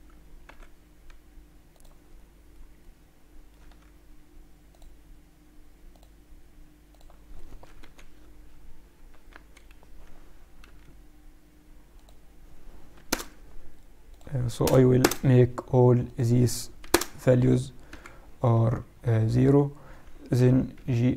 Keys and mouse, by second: 0.4 x, 2.1-3.2 middle drag, 3.6 Tab, 4.6-7.8 drag, 7.8 KP_1, 7.9 click, 8.5 click, 10.6 n, 11.9-13.9 drag, 14.0-16.0 drag, 17.7 click, 17.8 n, 19.0-21.0 middle drag, 20.3 g.